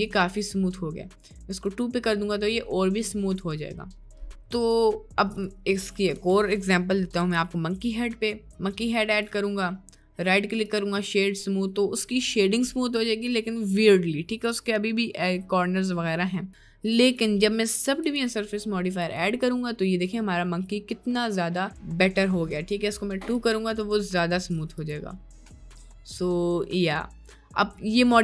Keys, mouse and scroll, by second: 1.5-4.0 drag, 5.4 click, 6.1 Delete, 7.4 shift+a, 10.3-11.1 right drag, 11.1-12.1 middle drag, 13.1-13.5 middle drag, 16.4-19.3 drag, 19.7 middle click, 20.3 middle drag, 20.9 middle click, 23.4 click, 24.3-24.6 middle drag, 25.3-26.2 middle drag, 26.6-27.2 middle drag.